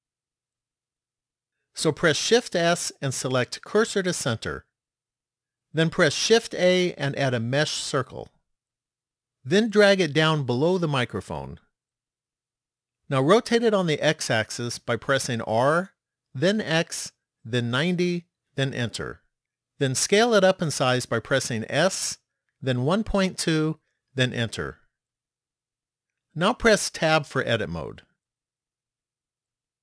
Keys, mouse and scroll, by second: 2.5 shift+s, 6.0 shift+a, 10.9 click, 15.5 r, 21.8 s, 27.0 Tab, 28.4-29.8 scroll up 5.